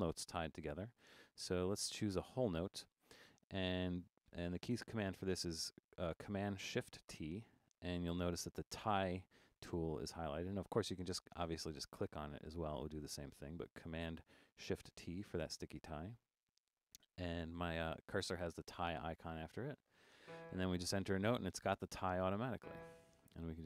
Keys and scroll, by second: 2.0 7, 7.1 shift+super+t.